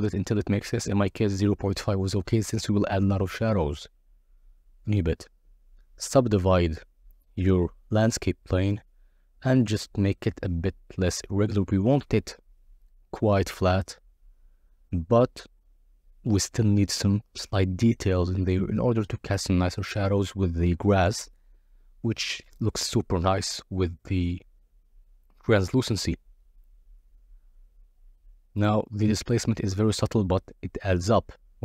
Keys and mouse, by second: 0.2 click, 0.8 click, 1.3 Tab, 1.6 a, 1.7 right drag, 2.1 click, 2.3 right click, 4.5 KP_0, 5.2 click, 5.5 o, 5.9 g, 8.1 click, 8.7 g, 9.4 click, 10.9-14.1 typing, 11.3 click, 12.2 click, 13.8 click, 14.8 Tab, 16.2-17.7 drag, 18.4 ctrl+a, 20.2 click, 21.8 click, 23.0 click, 24.0 KP_0, 24.4 z, 26.5 click, 27.1 click, 27.6-28.6 middle drag, 28.7 middle click, 29.4 z, 29.8 click.